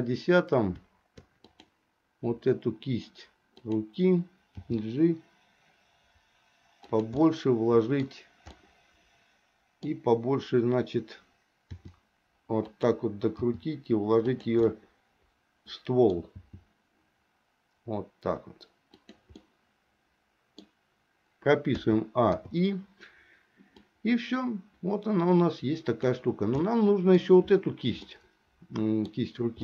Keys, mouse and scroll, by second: 1.5 click, 3.6 click, 4.8 g, 7.4 middle click, 8.7-10.2 middle drag, 11.7 r, 13.5 g, 14.8-16.4 middle drag, 16.5 g, 19.6-20.9 middle drag, 21.9 a, 22.6 i, 24.0-26.3 drag, 26.8 middle click, 28.2-29.3 middle drag.